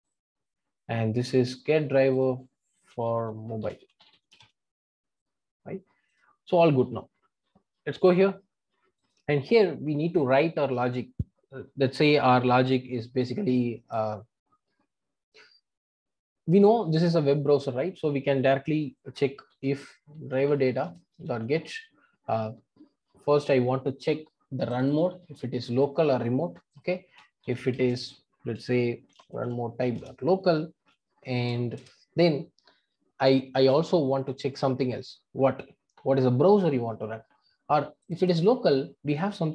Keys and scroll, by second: 20.9 Return, 30.0 Return.